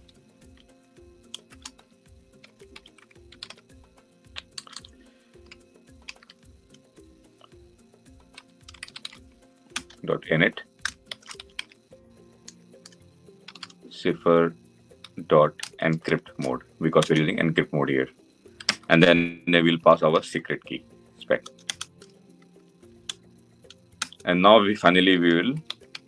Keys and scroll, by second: 3.1 Delete, 9.6 Return, 16.9 Return, 21.3 Return.